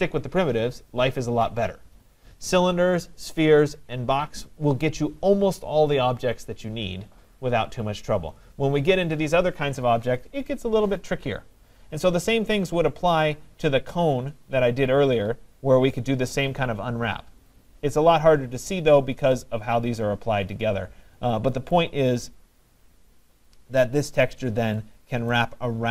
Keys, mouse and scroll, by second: 13.2 middle click, 13.3 middle click, 15.1 middle click, 15.2 middle click, 20.8 middle click, 20.9 middle click, 21.7 right click, 22.4 middle click, 22.4 middle click, 22.5 middle click, 25.3 right click.